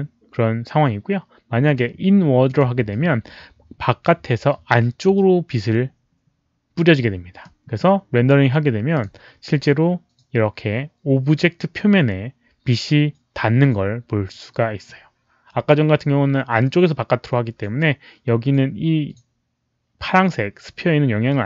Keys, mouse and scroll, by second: 1.6 click, 2.4 click, 7.4 click, 7.4 z, 7.5 z, 8.9 click, 8.9 z.